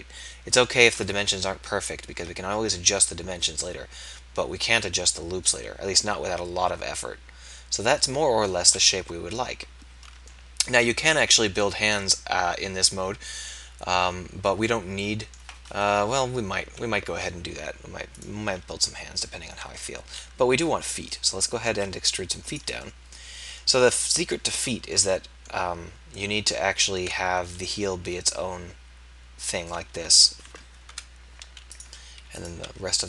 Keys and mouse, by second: 1.3 KP_1, 9.0 KP_1, 16.2 KP_1, 19.7 e, 27.4 e, 32.4 click, 32.6 e.